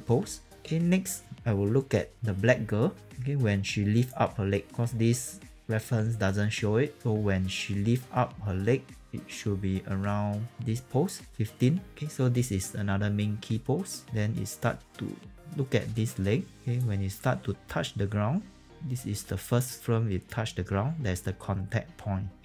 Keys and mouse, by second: 0.5 click, 3.0 click, 7.0 click, 11.9 s, 14.0 click, 16.7 click.